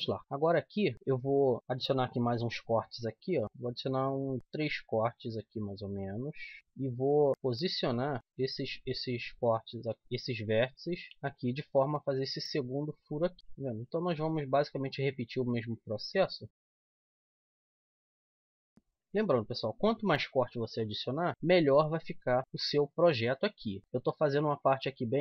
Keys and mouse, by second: 2.2 ctrl+r, 6.6-8.2 right drag, 7.9 click, 8.9 click, 9.8 middle click, 11.1-12.2 middle drag, 13.2 middle click, 13.6 middle click, 14.1-15.6 middle drag, 15.6-16.6 drag, 17.1 g, 17.5 click, 17.8 g, 18.2 g, 18.6 g, 21.3 z, 21.5 z, 22.2 middle click, 23.8 z, 24.7 middle click.